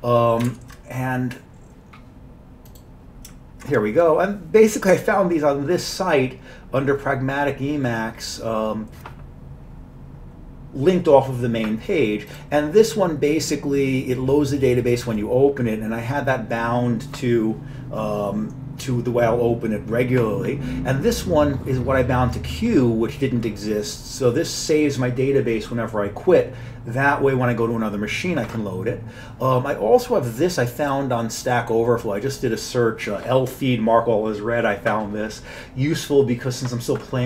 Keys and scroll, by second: 0.5 alt+Tab.